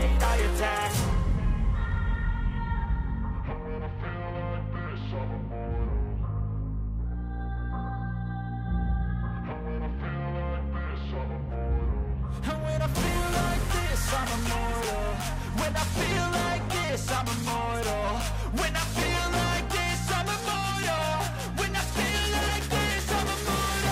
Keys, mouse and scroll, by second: 1.5 a, 6.2 ctrl+z, 8.9 shift+click, 12.7 shift+click, 19.6 shift+click.